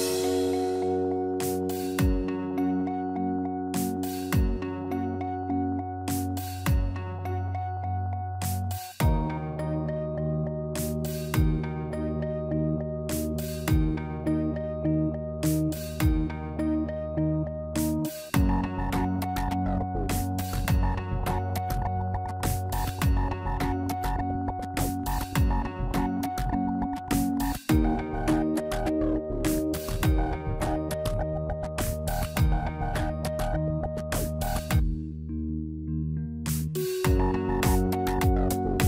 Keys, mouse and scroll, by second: 3.8 Tab, 4.3 click, 4.6 Tab, 7.8 Tab, 7.9 click, 8.2 Tab, 9.0 click, 10.3 Tab, 12.6 n, 14.5 click, 16.3 click, 24.8 middle click, 25.3 scroll up 2, 26.2 scroll down 1, 26.4 middle click, 27.1 click, 32.4 middle click, 32.8 scroll down 1, 34.1 click, 34.1 scroll down 2, 37.2 click, 37.7 Tab.